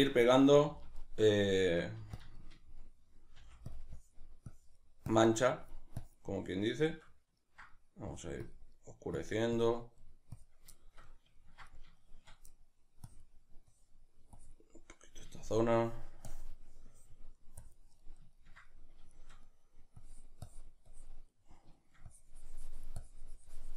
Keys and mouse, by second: 0.4 f, 0.8 click, 1.0-2.2 shift+middle drag, 2.0 f, 2.2 click, 2.4-3.8 shift+middle drag, 3.4 f, 3.8 click, 6.5-8.1 middle drag, 8.1 click, 8.7 middle click, 9.1 click, 10.0 middle click, 10.4 click, 10.7-13.1 shift+middle drag, 13.1-15.0 drag, 15.0-16.3 middle drag, 16.3-18.0 drag, 18.0-20.0 middle drag, 20.0-21.3 drag, 21.3 middle click, 22.1-23.7 drag.